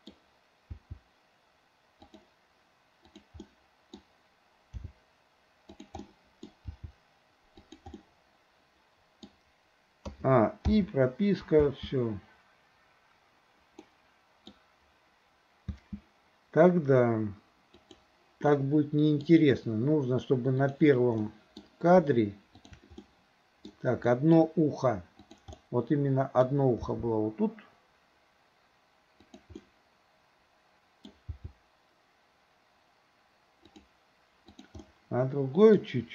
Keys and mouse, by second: 0.7 g, 3.1 click, 3.4-4.0 middle drag, 4.9 g, 6.0-6.5 middle drag, 6.8 g, 8.0-9.3 middle drag, 10.1 a, 10.7 i, 11.6 space, 13.9-14.5 middle drag, 15.7 space, 17.9 click, 18.5-19.3 middle drag, 20.6 click, 21.2-21.6 middle drag, 23.1-23.7 middle drag, 24.1 middle drag, 25.6-26.5 middle drag, 26.9 g, 29.6-31.1 middle drag, 31.4 g, 34.6 click, 34.9-35.8 middle drag.